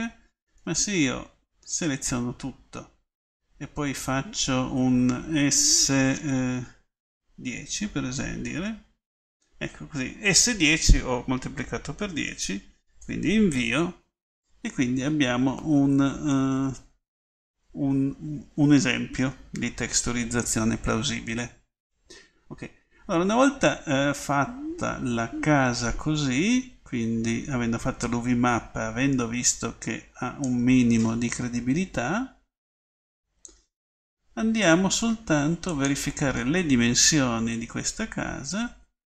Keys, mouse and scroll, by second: 0.8 a, 1.2 a, 1.8 a, 5.7 s, 15.4 middle click, 16.9 middle click, 17.5 middle click, 28.3 click, 36.0 click.